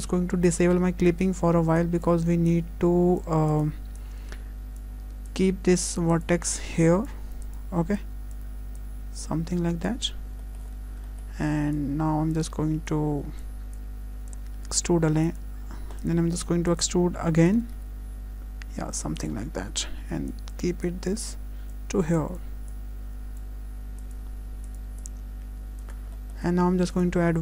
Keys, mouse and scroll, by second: 1.1 click, 1.8 click, 4.8-8.3 click, 8.8 click, 10.2 scroll down 1, 10.4 shift+middle click, 10.8 scroll up 1, 11.1 shift+middle click, 11.7 click, 12.9 click, 14.8 2, 15.2 click, 16.0 click, 17.4 e, 20.0 1, 20.3 click, 20.8 click, 22.7 click, 24.0 click, 25.0 click, 26.1 shift+middle click, 26.9 click.